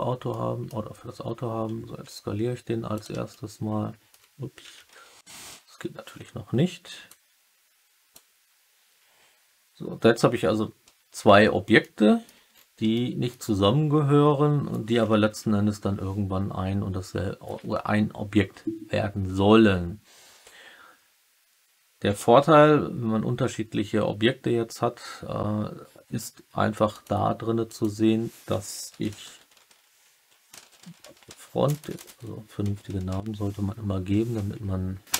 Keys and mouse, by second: 0.2-0.6 middle drag, 1.9 s, 2.9 click, 3.2-4.0 alt+drag, 4.7 KP_1, 5.4 KP_3, 7.1-8.1 drag, 11.7-12.2 alt+middle drag, 12.9-13.2 alt+middle drag, 15.2 KP_1, 26.8 click, 27.6-35.1 drag, 31.7 BackSpace, 31.9 BackSpace.